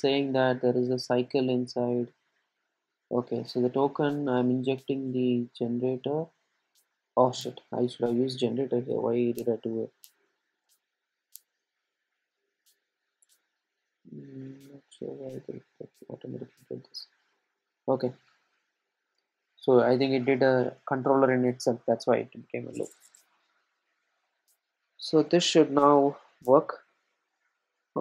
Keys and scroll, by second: 13.4 Return, 16.2 super+c, 17.9 super+v, 18.8 super+d, 19.8 super+z.